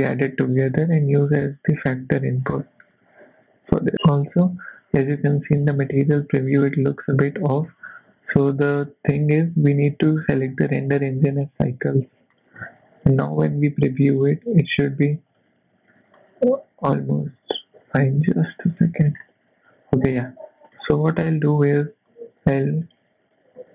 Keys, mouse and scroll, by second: 1.6 click, 3.8 click, 9.1 click, 10.4 click, 12.3 click, 13.0 click, 15.3-16.0 scroll down 3, 15.5 middle click, 16.3 click, 17.8 g, 18.8 middle click, 19.2 scroll up 2, 20.1 click, 20.8 middle click, 21.1 scroll down 2, 21.3 middle click, 22.1 click, 22.9 click, 23.6 g.